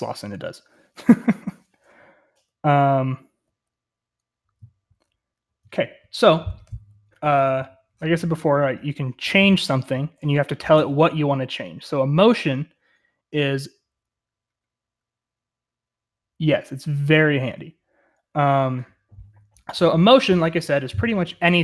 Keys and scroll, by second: 0.8-3.0 typing, 5.5 k, 7.2-8.7 typing.